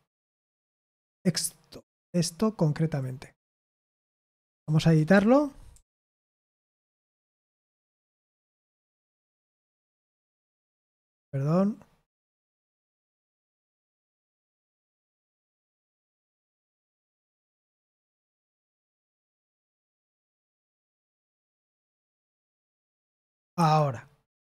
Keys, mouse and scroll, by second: 4.5 ctrl+p, 5.1 Return, 5.4-7.5 typing, 8.5-8.8 typing, 10.9 Escape, 14.0-15.8 typing, 22.9 ctrl+v, 23.5 Escape.